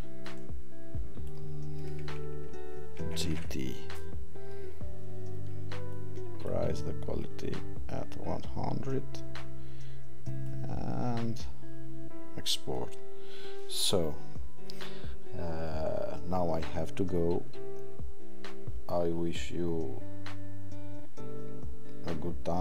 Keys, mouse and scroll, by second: 0.3 click.